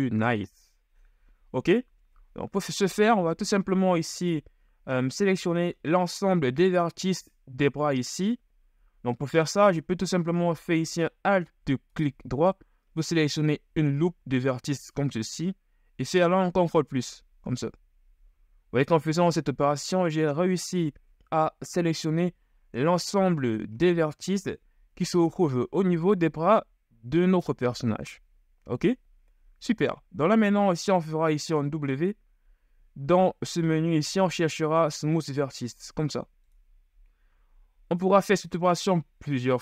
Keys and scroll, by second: 8.9 KP_1, 15.2 KP_1, 16.7 ctrl+KP_Add, 17.1 ctrl+KP_Add, 17.8 ctrl+KP_Add, 31.0 KP_1, 31.8 w.